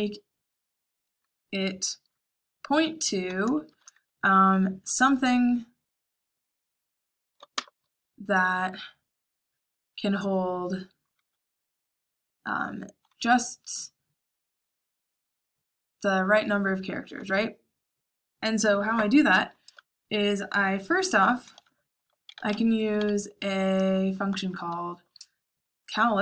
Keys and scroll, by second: 3.6 shift+9, 7.5 BackSpace, 22.0-24.3 typing.